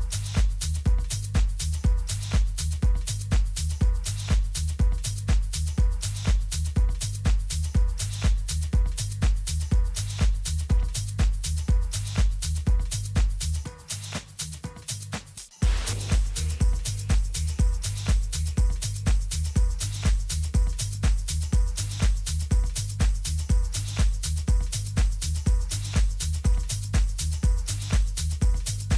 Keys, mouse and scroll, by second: 9.0-11.1 middle drag, 11.1 z, 11.6-14.1 middle drag, 14.1 right click, 14.3-16.7 middle drag, 17.4 r, 24.4 a, 25.9-27.6 right drag.